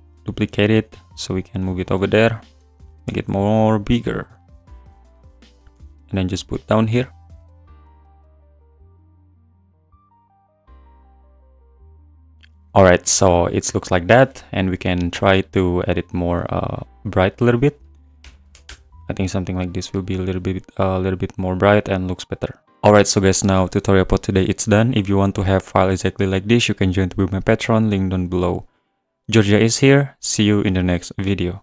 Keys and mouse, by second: 0.5 g, 1.3 click, 2.5 g, 3.0 click, 3.0 s, 5.7 g, 7.5 click, 7.6-12.0 typing, 8.2 click, 8.6 click, 14.3 click, 16.4 click, 17.3-18.7 drag, 21.6 click.